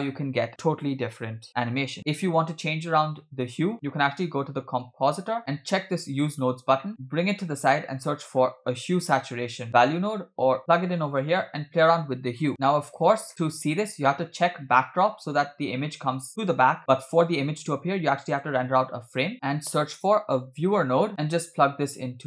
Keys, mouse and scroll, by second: 0.7 space, 3.7-5.4 drag, 5.4 middle click, 5.4 scroll down 4, 6.2 click, 6.8 middle click, 6.9 click, 7.5 shift+a, 12.5 middle click, 12.5 click, 12.5-13.0 scroll down 2, 13.1 scroll down 2, 13.3 middle click, 13.6-15.0 scroll up 2, 15.0-15.5 scroll down 2, 15.9 scroll down 2, 18.3-19.3 drag, 19.3 shift+a, 21.8-22.2 drag.